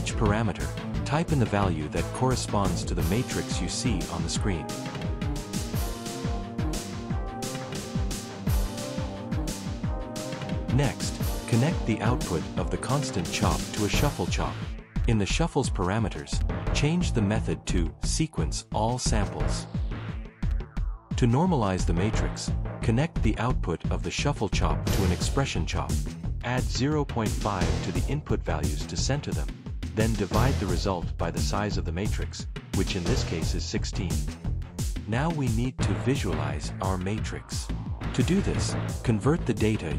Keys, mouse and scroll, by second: 3.3 BackSpace, 3.6 8, 4.0 Return, 4.9 click, 5.1-8.5 typing, 5.1 Return, 5.2 click, 5.4 Return, 5.7 click, 6.0 click, 6.1 Return, 6.3 click, 6.4 Return, 6.4 click, 6.5 Return, 6.7 click, 6.9 Return, 7.0 click, 7.1 Return, 7.1 click, 7.3 Return, 7.4 click, 7.6 Return, 7.9 click, 8.1 click, 8.2 Return, 8.3 click, 8.4 Return, 8.5 click, 8.6 Return, 9.8 middle click, 10.7 middle click, 10.8 click, 14.8 click, 16.1 click, 17.3 click, 20.6 click, 21.4 right click, 21.7 e, 22.2 x, 23.1 click, 24.3 click, 27.4 space, 29.3 space, 30.2 Left, 31.5 Left, 32.6 Left, 33.3 8, 33.5 Return, 34.7 middle click, 36.2 right click, 37.8 click.